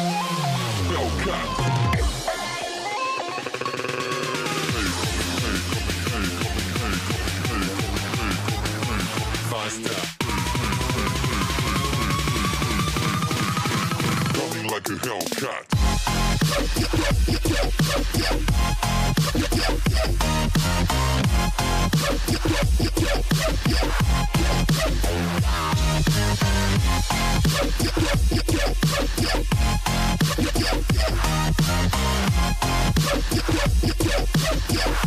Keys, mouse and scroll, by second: 1.9 click, 2.4-4.0 scroll down 6, 4.0 click, 4.3-6.0 scroll up 3, 6.0 shift+click, 7.3 shift+click, 8.3 shift+click, 9.4 click, 11.0 click, 12.6-13.3 scroll down 4, 13.3 e, 16.2 click, 18.6 click, 22.0 click, 23.7 click, 26.8 click, 27.4-28.4 scroll down 3, 28.4 e, 30.5-31.1 scroll up 8, 31.3-31.7 scroll down 3, 32.1 click, 33.1 click.